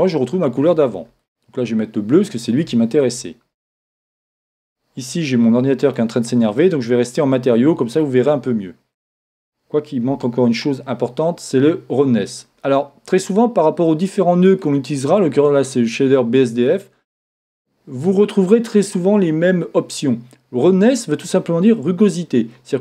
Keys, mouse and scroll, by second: 4.6-6.7 drag, 10.2 shift+z, 14.6-17.7 drag, 14.7 typing, 22.5-22.8 drag.